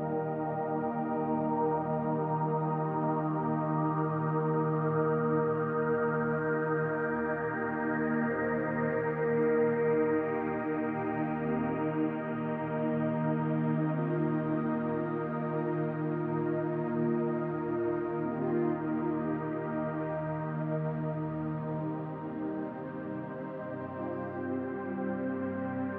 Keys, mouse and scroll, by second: 1.5 click, 10.7 middle click, 14.1 click, 15.5 scroll down 1, 16.5 Tab, 16.5-17.0 scroll down 1, 17.0-17.5 scroll up 3, 17.5 middle click, 18.9 Tab, 19.5-19.8 scroll down 2, 19.8 middle click, 20.7-21.1 scroll down 2, 21.1 shift+middle click, 21.5 middle click, 23.1-23.8 scroll down 2, 23.5 middle click, 24.0 scroll down 2, 24.4 shift+middle click, 25.3 click.